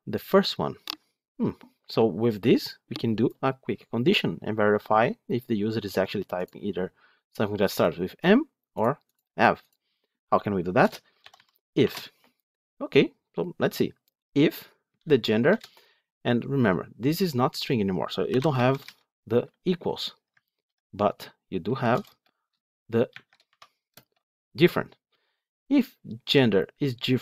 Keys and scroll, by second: 15.4 Return, 20.5 ctrl+BackSpace.